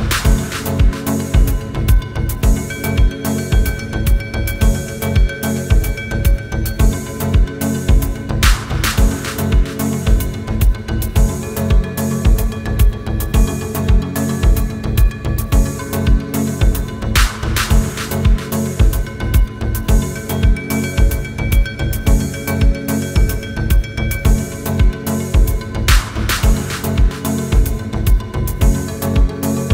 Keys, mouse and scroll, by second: 0.1 space, 0.2 scroll up 1, 0.9 scroll down 1, 1.2-1.5 scroll up 1, 1.9-2.2 scroll down 1, 2.8 scroll up 1, 3.5 middle click, 4.2 scroll down 1, 4.7 middle click, 5.2 scroll up 1, 5.5 middle click, 8.7 space, 8.8 middle click, 9.3 scroll down 1, 9.4 middle click, 9.8 scroll down 1, 9.9 middle click, 10.3-10.7 scroll down 2, 10.4 middle click, 11.0 middle click, 11.4 scroll down 1, 11.7 scroll up 1, 12.1 middle click, 14.0 scroll down 1, 14.2 middle click, 14.9 scroll down 1, 15.1 middle click, 15.8 scroll down 1, 15.9 scroll up 1, 16.3 middle click, 16.9 scroll down 1, 17.6 space, 18.0-19.2 scroll up 1, 19.2 double click, 20.4 ctrl+a, 27.6 space, 28.0 scroll down 1, 28.2 middle click, 28.5 scroll up 1.